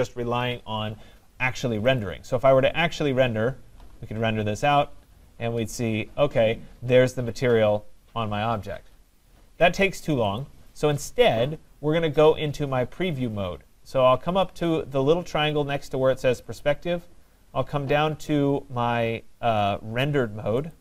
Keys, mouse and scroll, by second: 2.0 click, 2.8-7.1 drag, 10.4-13.9 drag, 16.6 click, 20.7 click.